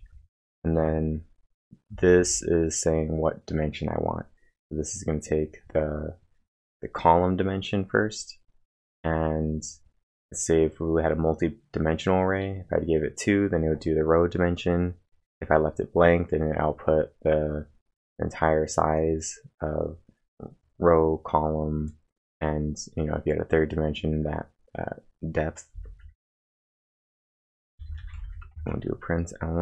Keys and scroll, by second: 25.7 typing, 26.7-29.0 typing.